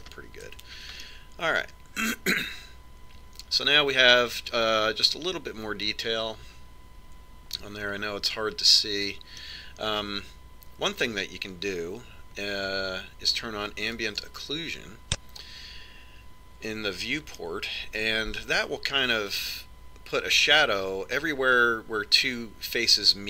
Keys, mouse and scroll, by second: 0.3-3.8 middle drag, 1.5 Tab, 15.1 click, 16.8 click, 18.5-20.4 middle drag.